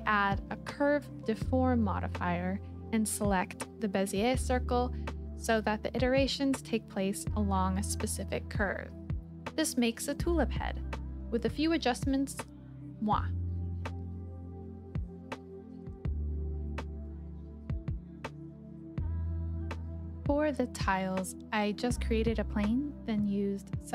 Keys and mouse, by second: 0.0 KP_7, 1.8 click, 3.5 s, 4.8 click, 6.5 click, 7.8-9.0 drag, 9.2 middle click, 10.4 ctrl+z, 11.0 g, 11.3 y, 13.3 click, 13.6 Tab, 14.2 click, 14.4 middle click, 15.6 click, 16.2 middle click, 16.7 shift+click, 19.9 s, 20.2 x, 21.2 click, 21.8-23.2 middle drag, 23.5 s.